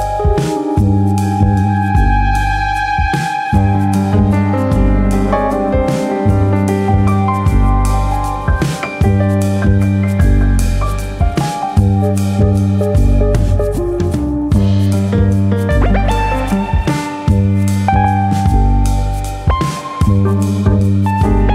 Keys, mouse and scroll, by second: 1.2 alt+click, 2.0 r, 2.9 click, 3.5 click, 3.7 alt+click, 4.5 alt+click, 4.6 alt+click, 5.0 click, 6.4 ctrl+b, 8.0 click, 10.4 click, 13.3 click, 19.6 click, 20.4 click.